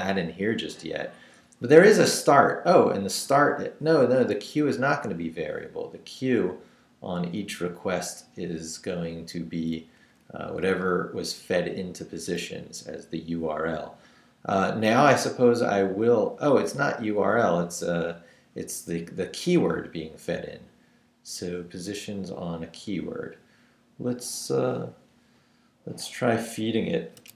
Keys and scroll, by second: 10.0 Up, 10.6 Right, 12.2 Right, 17.0 Right, 27.2-27.3 typing.